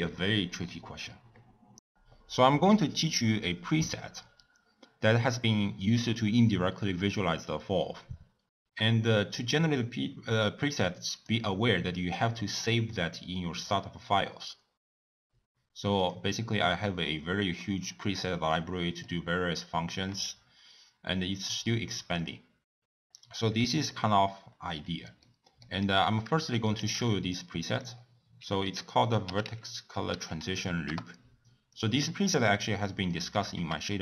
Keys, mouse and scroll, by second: 8.4 click, 11.1-14.1 drag, 16.0 click, 17.3-18.6 scroll down 16, 18.6 middle click, 19.4 scroll up 1, 19.6 scroll down 2, 19.8 scroll up 1, 19.9-21.4 scroll down 5, 21.4-22.8 drag, 22.8-23.1 scroll up 4, 23.1-23.7 scroll down 1, 23.9-24.6 scroll up 8, 25.2 middle click, 25.8-26.8 scroll up 1, 26.8 shift+a, 32.1 middle click, 32.6-33.1 scroll up 1, 33.1 middle click, 33.5 g.